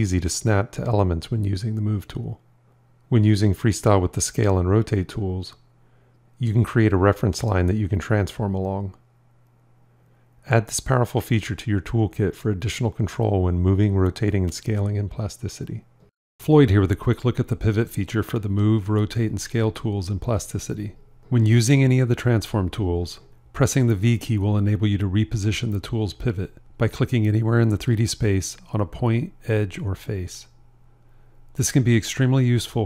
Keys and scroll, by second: 4.7 s, 5.7 f, 11.4 r, 12.4 f, 21.9 r, 23.8 v, 28.3 s, 29.8 v.